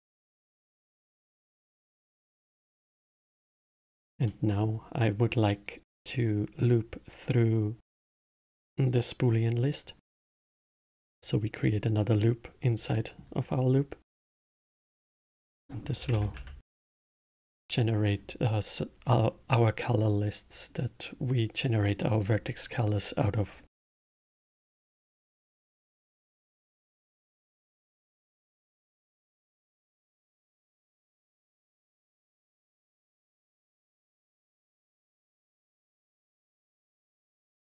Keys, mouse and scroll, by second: 0.3-3.3 middle drag, 4.2-5.5 middle drag, 5.5 click, 8.1-10.0 drag, 10.0 middle click, 10.6-12.7 drag, 12.9 middle click, 13.7-18.0 drag, 32.0-35.1 drag, 36.0 o.